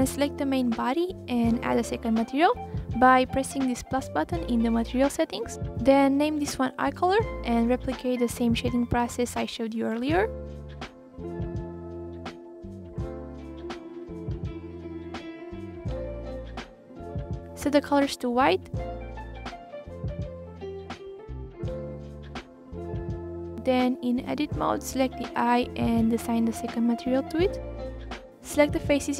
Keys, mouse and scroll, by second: 0.2 click, 0.8-1.6 scroll down 3, 1.6-2.1 scroll down 1, 2.1 scroll up 1, 2.4 click, 3.7 click, 4.4-7.9 drag, 7.9 Delete, 9.0 shift+a, 11.8-12.6 drag, 13.5 shift+a, 14.1-14.5 drag, 14.9 drag, 16.1-17.2 drag, 19.9 f, 20.6 drag, 21.9 click, 24.5 click, 24.8-25.4 scroll up 9, 25.4 click, 26.9-28.1 drag, 28.1 ctrl+z.